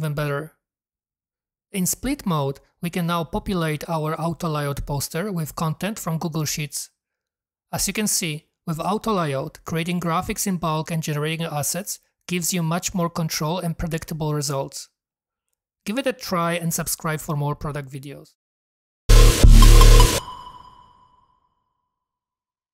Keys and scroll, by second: 5.9-7.0 typing.